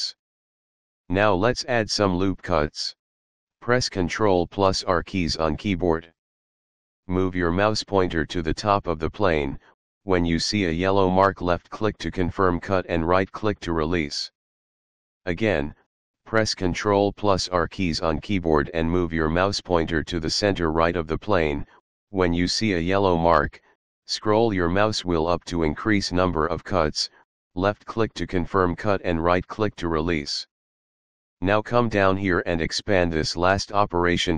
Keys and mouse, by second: 6.1 ctrl+r, 7.9 click, 10.9 right click, 19.4 ctrl+r, 25.5 click, 27.4 right click, 32.3 click.